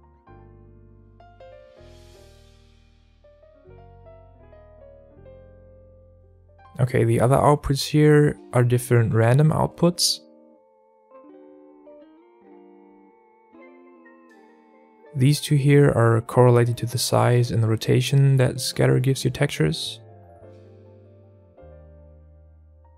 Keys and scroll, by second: 0.3 alt+a, 19.0 alt+a.